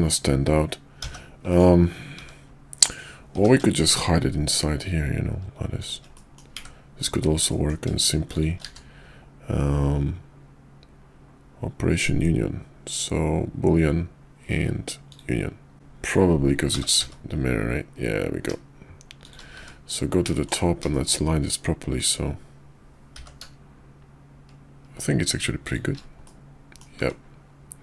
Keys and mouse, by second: 1.0 g, 2.2 `, 3.3 g, 6.1 middle drag, 7.5 middle drag, 8.3 shift+click, 8.6 q, 16.7 g, 19.5 `, 20.3 shift+middle click, 20.9 shift+middle click, 23.1 g, 26.2-26.8 middle drag.